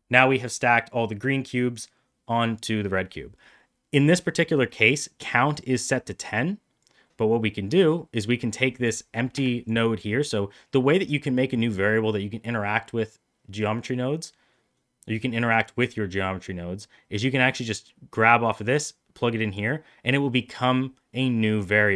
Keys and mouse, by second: 6.7-9.5 drag, 16.8-19.4 drag.